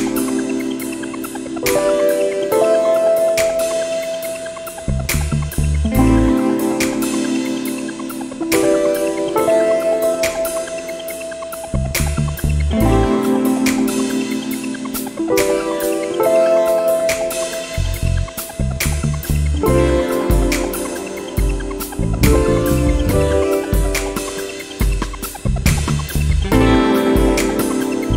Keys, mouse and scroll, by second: 1.1 1, 2.3 click, 3.7-4.2 scroll up 1, 5.9 click, 9.8 click, 12.5 click, 15.5 click, 16.6 click, 18.4 click, 19.5 click, 21.5 click, 22.2 click, 23.4 click, 24.4 click, 27.8 click.